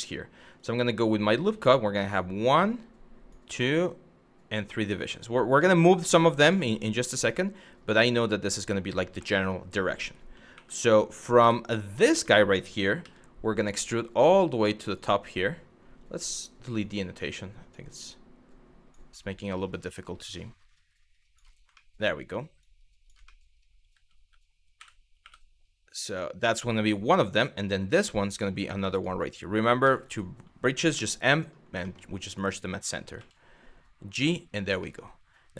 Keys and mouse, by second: 0.2 click, 0.9 click, 2.3 click, 3.3 click, 5.3 shift+middle click, 6.2 shift+middle click, 7.6 shift+middle click, 8.9 shift+middle click, 10.2 2, 11.0 w, 11.4 click, 12.0 shift+middle click, 12.6 e, 14.5 click, 16.3 click, 17.0 click, 17.5-18.6 drag, 18.9-21.0 drag, 21.4 shift+middle click, 22.3 click, 22.9 shift+middle click, 24.4 w, 24.8 2, 27.5 e, 28.6 click, 29.4 1, 29.6 click, 31.5 shift+middle click, 31.9 click, 32.8 g, 33.7 click, 34.5 middle click.